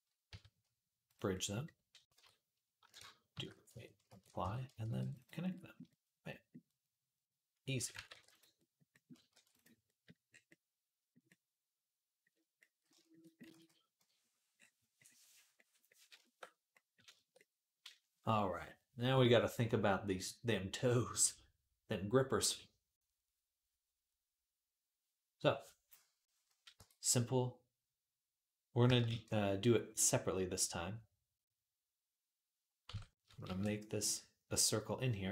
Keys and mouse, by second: 0.1 q, 0.9-7.3 drag, 2.0 Tab, 3.2 shift+d, 3.9 ctrl+a, 4.2 Tab, 4.7 ctrl+r, 7.9 ctrl+r, 9.1 ctrl+r, 9.7-19.3 drag, 14.0 ctrl+s, 26.6 Tab, 28.9 shift+a, 32.0-35.3 middle drag, 32.7 Tab, 33.3 shift+a.